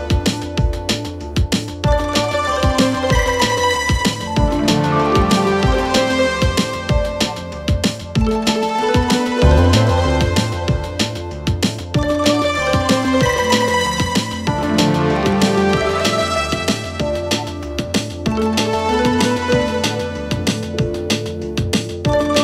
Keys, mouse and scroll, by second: 0.0-1.1 typing, 5.2 click, 7.4-11.1 drag, 11.2 click, 17.4 click, 19.6 click.